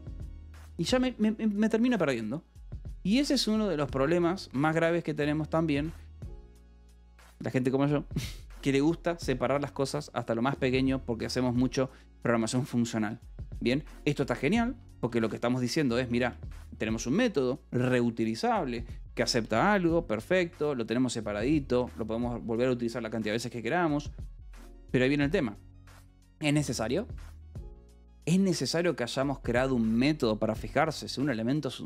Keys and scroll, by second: 14.6 Escape, 15.5 ctrl+s, 16.7 shift+v, 19.3 Escape, 19.7 h.